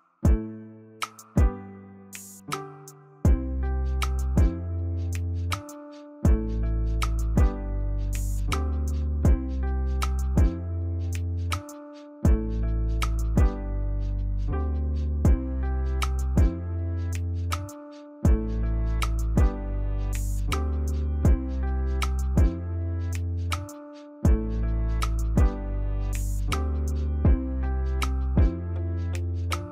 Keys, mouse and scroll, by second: 12.7 double click, 22.8 e, 25.4 ctrl+a, 27.0 1, 28.9 Return.